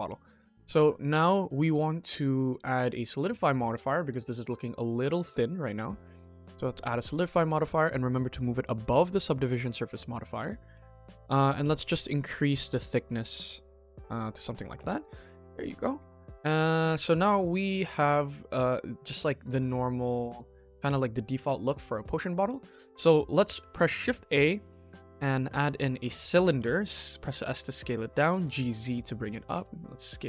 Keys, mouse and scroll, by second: 0.6 middle click, 0.6 scroll down 1, 0.9 click, 1.7-2.0 scroll up 3, 2.1 middle click, 5.5-6.6 drag, 8.0-8.9 drag, 10.3 shift+middle drag, 10.7-11.1 middle drag, 12.2 click, 12.8 click, 13.8 click, 14.2 middle drag, 14.4 scroll down 2, 14.7 click, 15.0 KP_1, 15.6-15.9 shift+middle drag, 16.3-16.6 shift+middle drag, 16.9-18.7 middle drag, 18.8 middle click, 18.9 middle drag, 19.4 ctrl+s, 19.9-21.2 middle drag, 21.5 KP_1, 22.1 shift+middle drag, 22.9 scroll up 1, 23.1-23.5 scroll down 2, 23.6 shift+middle drag, 23.9 shift+a, 26.0 s, 28.4 g, 29.4 s.